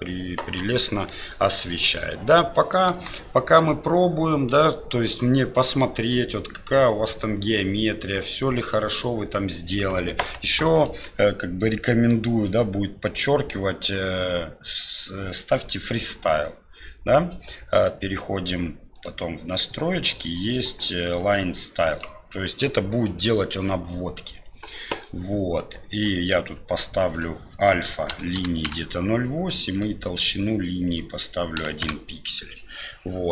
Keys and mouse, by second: 3.2 shift+click, 10.7 click, 14.6 click, 17.7 click, 18.9 click, 25.9 click, 27.2-29.1 drag, 29.7 click, 30.8-32.4 drag.